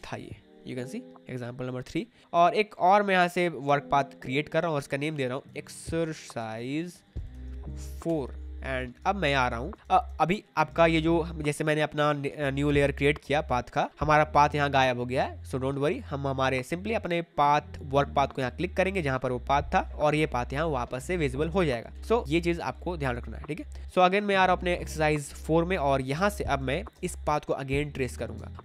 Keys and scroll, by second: 4.7-7.8 typing, 8.0 Return, 10.5 space, 22.2 space, 26.2 space.